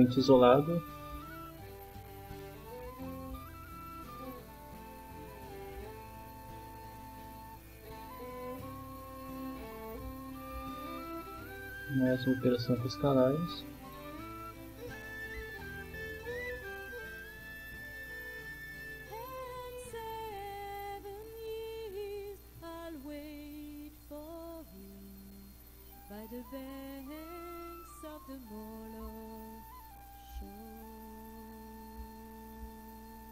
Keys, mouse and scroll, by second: 1.9 click, 3.1-4.3 drag, 5.4 click, 6.9 click, 8.3 right click, 11.4 click, 13.2-18.1 drag, 19.1-20.9 drag, 21.9 click, 23.2 click, 24.3 click, 25.3 click, 26.5 click, 28.0-29.2 drag, 30.1 click, 31.3 click, 32.8-33.3 drag.